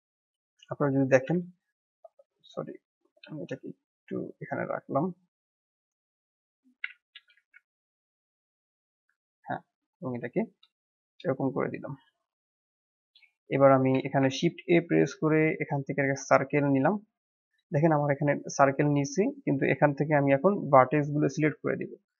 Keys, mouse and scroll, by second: 0.0-1.2 drag, 2.6-3.0 drag, 3.0 g, 7.1 g, 8.7-10.7 drag, 10.7-13.0 shift+middle drag, 13.0-13.9 drag, 13.9 shift+a, 16.6-17.8 middle drag, 17.8-19.0 scroll up 2, 19.2 click.